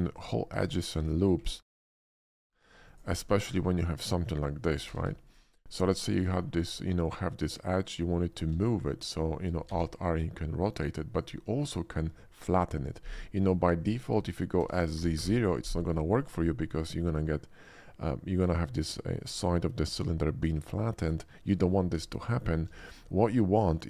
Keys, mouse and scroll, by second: 0.3 Tab, 0.6 click, 1.0 s, 1.4 click, 1.6 middle click, 1.8 Tab, 2.3 ctrl+Tab, 2.6 ctrl+r, 2.8 click, 3.4 Tab, 4.8 g, 5.0 g, 5.2 click, 5.8 middle click, 7.6 alt+click, 8.1 alt+middle click, 8.5 alt+middle click, 8.8 alt+middle click, 9.6 alt+r, 11.2 right click, 13.0 middle click, 14.6 s, 14.8 z, 15.0 0, 15.1 Return, 16.2 middle click, 18.2 middle click, 18.6 middle click, 18.9 shift+middle click, 19.3 shift+middle click, 21.1 ctrl+z, 22.0 middle click, 22.3 middle click, 23.4 middle click.